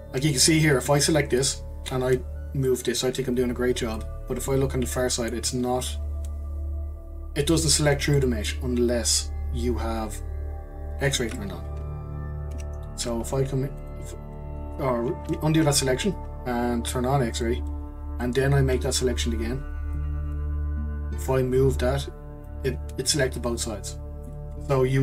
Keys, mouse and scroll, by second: 0.3 click, 0.8 click, 2.6 click, 4.3 scroll down 1, 4.5-7.5 middle drag, 8.1-11.0 middle drag, 11.0 click, 12.5 ctrl+z, 13.8 click, 17.3 click, 21.3 click, 22.6-25.0 middle drag.